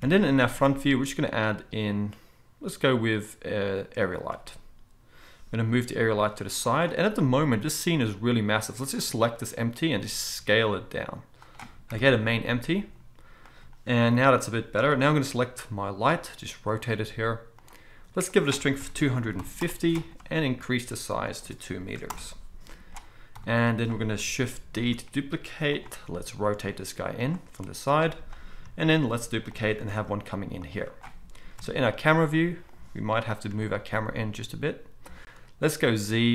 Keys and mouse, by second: 0.0 KP_1, 0.7 shift+a, 5.7 g, 6.8-9.9 middle drag, 9.9 s, 11.9 KP_1, 13.5-13.9 drag, 13.9 g, 15.2 r, 16.1-17.6 middle drag, 17.6 click, 17.7 middle click, 18.3-25.8 drag, 23.3 KP_7, 24.8 shift+d, 25.8-34.6 middle drag, 26.0 r, 28.9 shift+d, 29.8 r, 31.5 KP_0, 33.5 g, 35.8 z.